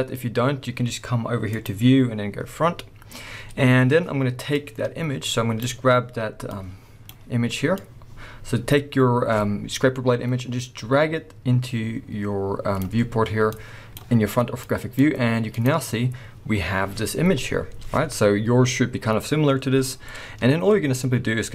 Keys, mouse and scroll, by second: 0.0-1.0 scroll up 1, 1.0 scroll up 1, 1.4-5.1 drag, 2.9-4.6 scroll up 2, 4.9 scroll up 1, 5.5-21.5 drag, 5.5-13.6 scroll up 2, 16.1-16.8 scroll down 2, 16.8-18.0 scroll up 2, 18.0-19.1 scroll up 1, 19.1-20.0 scroll up 1, 20.1-20.9 scroll down 1, 20.9 scroll up 1.